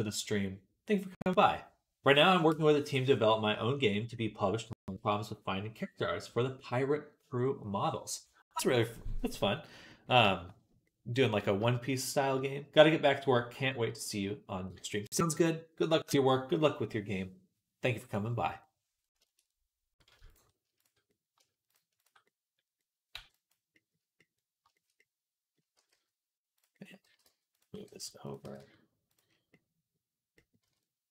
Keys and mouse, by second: 9.6-20.0 right drag, 20.0-21.9 shift+drag, 20.1 shift+right click, 20.6 shift+right click, 21.9-23.6 right drag, 23.0 b, 23.6-24.8 middle drag, 24.8-27.6 right drag, 25.6 r, 26.9 g, 27.6-31.1 drag, 27.6 r, 28.3 g, 30.5 z.